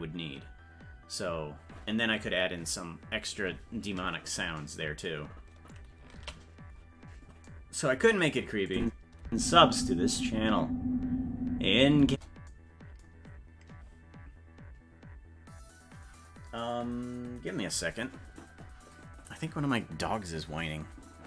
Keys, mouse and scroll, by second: 6.6 ctrl+s, 8.7 click, 9.3 space.